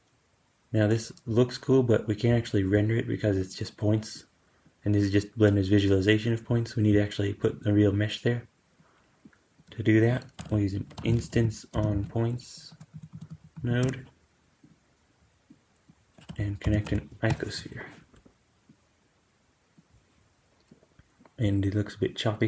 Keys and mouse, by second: 4.0-14.6 drag, 10.2 q, 12.8 Down, 13.2 Down, 15.5-17.9 drag, 16.2 q, 18.6-22.4 drag.